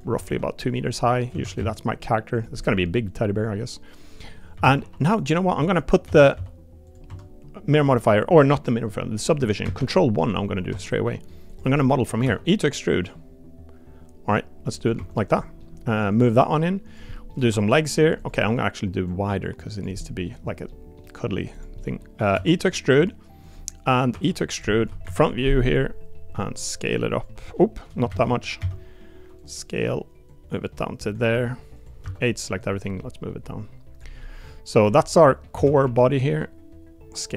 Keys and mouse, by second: 0.2 s, 1.3 s, 2.5 middle click, 4.2 middle click, 4.5 s, 6.0 s, 7.0 Tab, 9.6 ctrl+1, 10.2 middle drag, 10.7 Tab, 11.0 middle click, 11.5 click, 11.7 middle click, 12.2 e, 14.9 2, 15.1 click, 15.4 middle click, 16.1 click, 17.1 middle click, 17.4 3, 17.6 click, 18.4 middle click, 19.1 click, 20.0 middle click, 20.7 middle click, 21.0 middle click, 21.5 click, 21.8 middle click, 22.3 e, 24.1 e, 26.3 s, 28.1 ctrl+z, 28.6 s, 30.3 click, 31.3 r, 32.0 a, 32.6-34.0 drag, 34.2 middle click, 35.1 middle click, 35.5 s.